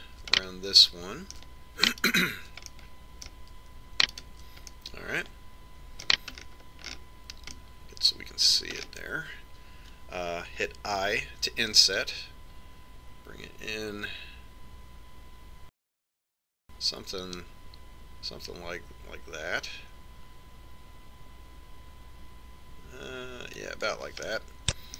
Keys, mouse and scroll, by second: 0.3-2.7 right drag, 2.3 click, 3.7 middle click, 4.1 right click, 5.1-6.3 middle drag, 6.3 right click, 6.7-8.5 middle drag, 8.5-9.5 scroll up 1, 9.5-12.7 middle drag, 13.0 i.